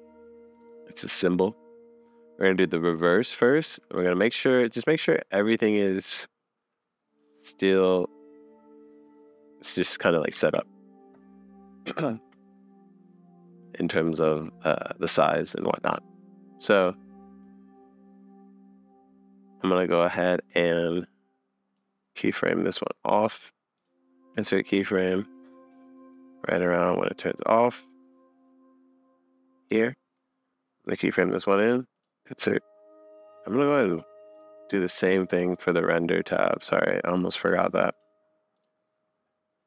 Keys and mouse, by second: 2.5 middle click, 2.8 middle click, 3.8 g, 5.6 click, 6.1-6.6 drag, 6.7 middle click, 7.0 click, 10.4 super+s, 20.5 click, 21.7-22.8 middle drag, 22.9 middle click, 23.8-24.9 middle drag, 25.5 middle click, 28.1-29.7 drag, 30.9 click, 35.5 click, 37.6 click, 38.1 click.